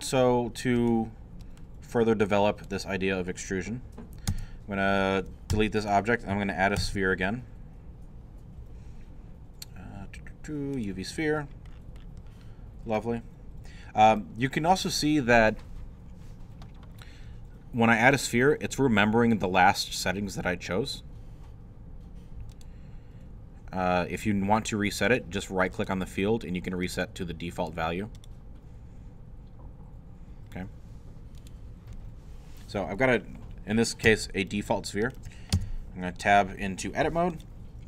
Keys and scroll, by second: 4.3 Tab, 5.5 x, 6.3 shift+x, 6.8 shift+a, 35.5 shift+Tab, 36.3 Tab.